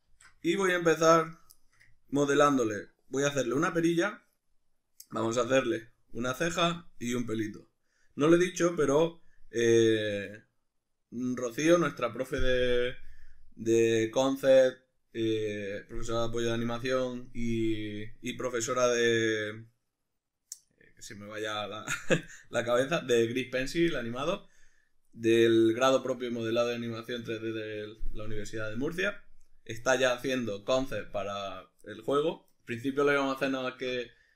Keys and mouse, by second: 0.1 alt+q, 1.2 right click, 1.5-34.3 shift+middle drag.